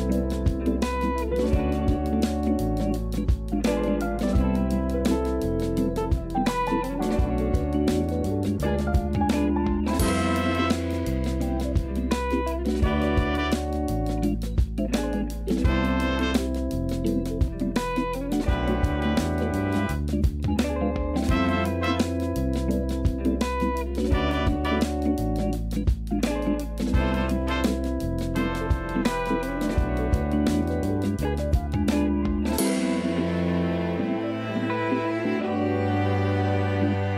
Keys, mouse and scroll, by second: 1.7 click, 3.2-6.2 drag, 7.8 click, 9.0 click, 13.4 click, 14.6 click, 15.2-15.9 scroll up 14, 16.4-19.0 middle drag, 19.0 click, 21.1 click, 22.3 click, 24.0 scroll up 1, 24.6-25.3 scroll up 2, 25.3 click.